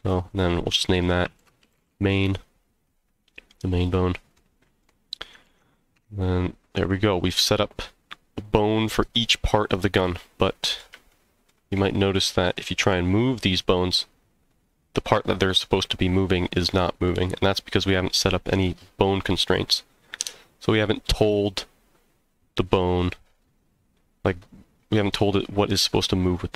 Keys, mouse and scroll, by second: 0.0-2.9 drag, 3.8 click, 4.3 middle click, 5.5 ctrl+s, 5.9 Tab, 6.5-6.9 scroll down 1, 6.9-7.3 middle drag, 7.5 scroll up 1, 9.7 click, 10.5-10.8 middle drag, 11.1-11.5 shift+middle drag, 12.9 g, 14.7 right click, 17.0 scroll up 1, 17.0-17.5 middle drag, 17.7 scroll down 1.